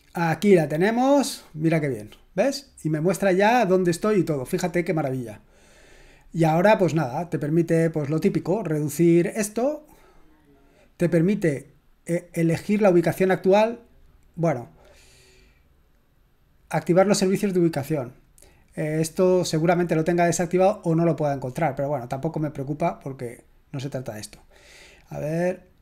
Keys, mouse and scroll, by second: 7.7-8.7 drag, 12.7 click, 18.1 click, 22.6 click, 24.0 click, 25.0 click.